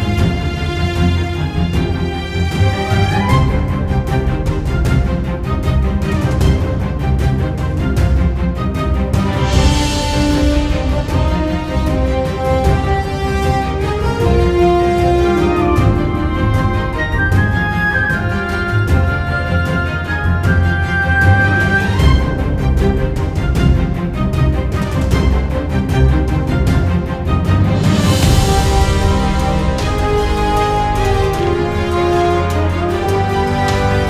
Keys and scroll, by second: 29.9 super+z, 30.6 super+z, 30.6 super+y.